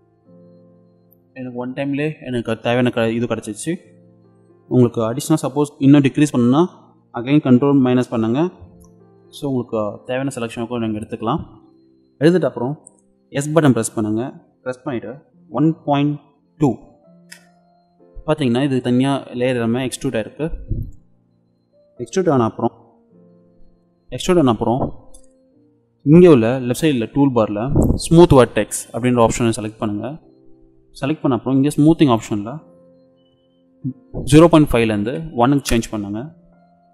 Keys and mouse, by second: 13.5 s, 18.5 click, 29.2-31.1 drag, 31.1 middle click, 32.1-34.0 drag.